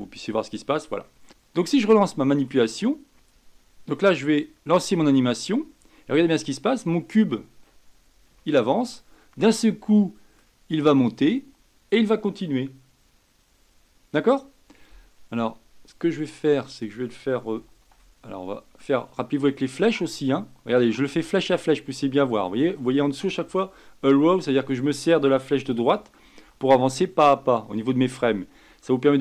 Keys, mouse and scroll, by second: 0.0 n, 0.6-1.0 scroll down 3, 1.0-3.1 shift+middle drag, 4.7 space, 6.8-8.4 scroll up 4, 8.4-10.4 shift+middle drag, 10.4-11.2 scroll up 1, 11.2-12.2 scroll down 1, 12.2-13.5 scroll down 1, 13.5 Escape, 17.5 Right, 17.8 Right, 18.0-21.2 Right, 21.4 Right, 21.6 Right, 21.8 Right, 22.0 Right, 22.2 Right, 22.4 Right, 23.2 Right, 23.4 Right, 23.7 Right, 24.5 Right, 25.9 Right, 26.2 Right, 26.4 Right, 26.6 Right, 26.9 Right, 27.1 Right, 27.4 Right, 27.6 Right, 27.9 Right, 28.1 Right, 28.4 Right, 28.6-29.2 Right.